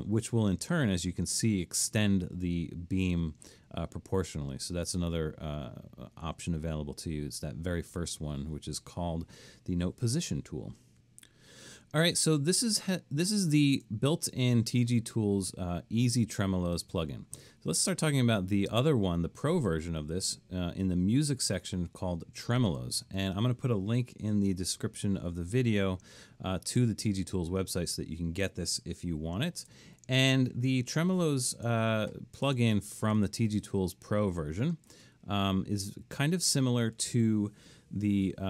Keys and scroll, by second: 25.2 super+-, 29.5 super+-.